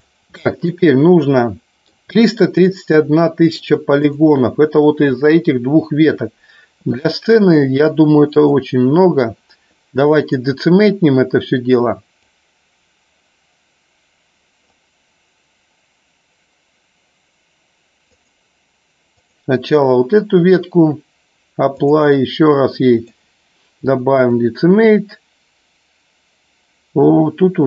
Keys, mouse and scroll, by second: 1.1-2.0 middle drag, 2.3-3.6 shift+middle drag, 4.1 click, 7.6 click, 8.3-11.0 drag, 12.1-16.6 drag, 18.1-21.0 drag, 21.8-23.2 drag, 24.2-27.6 drag.